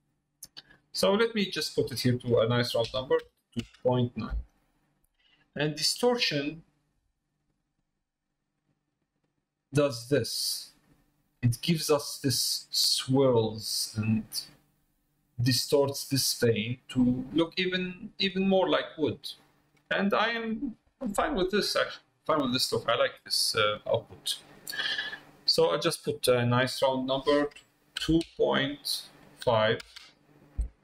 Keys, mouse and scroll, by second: 1.5-4.7 drag, 8.7-12.3 drag, 14.8 middle click, 16.5 middle click, 17.4 middle click, 18.3 middle click, 21.5 middle click, 22.1 middle click, 22.9 shift+middle click, 26.5-30.6 drag.